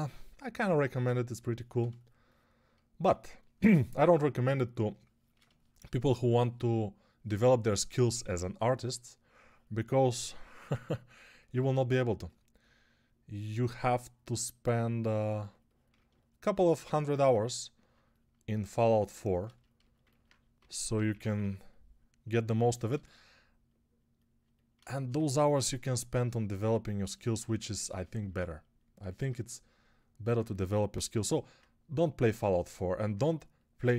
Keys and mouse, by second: 20.4-21.2 typing, 25.4 1, 30.8 g.